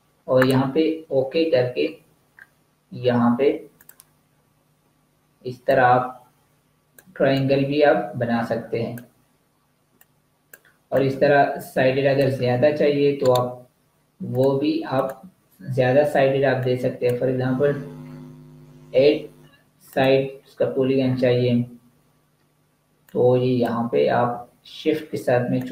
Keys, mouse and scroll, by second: 0.2 click, 1.4 scroll down 1, 2.2-3.6 scroll up 1, 3.6 click, 13.1 right click, 14.3 click, 18.5 8, 19.7 click, 20.9-22.9 scroll down 1, 22.9 click.